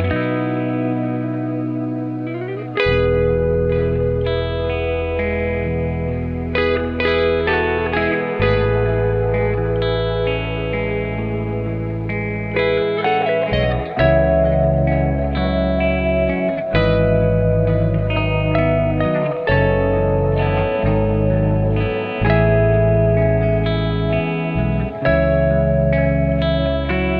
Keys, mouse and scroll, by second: 0.3 ctrl+r, 2.0 s, 3.9 click, 4.3 s, 6.2 ctrl+r, 7.7 click, 9.0 g, 12.1 click, 13.4 click, 15.4 r, 16.9-18.3 drag, 18.3 g, 19.5 click, 21.2 click, 23.8 g, 25.9 click.